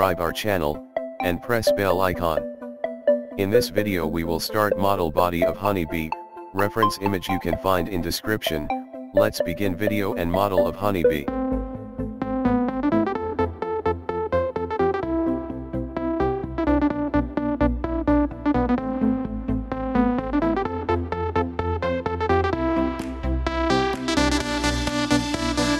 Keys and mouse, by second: 0.9 click, 5.3 click, 7.1 middle click, 9.1 KP_1, 15.4 middle click, 18.5 shift+s, 19.9 click, 20.8 shift+a, 24.1 click, 24.9 middle click.